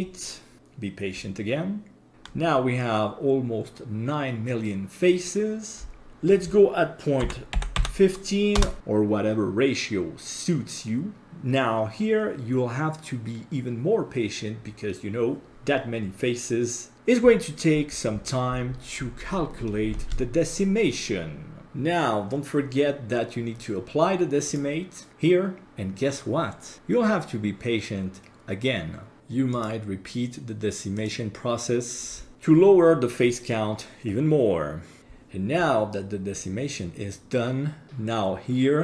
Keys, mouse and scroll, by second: 6.1-21.7 drag, 24.4-29.2 drag, 29.5-31.4 drag, 32.3 click, 37.9-38.8 drag.